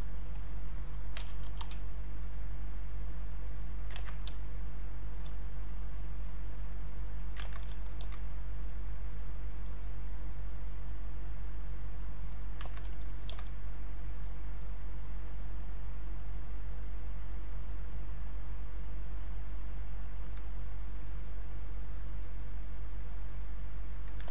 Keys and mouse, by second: 0.9-2.2 typing, 2.9 click, 4.0 ctrl+z, 4.3 space, 4.9 click, 5.8-7.5 drag, 7.5 ctrl+z, 8.0 ctrl+d, 10.3-12.6 drag, 12.6 ctrl+z, 13.3 ctrl+d, 14.1-24.3 drag.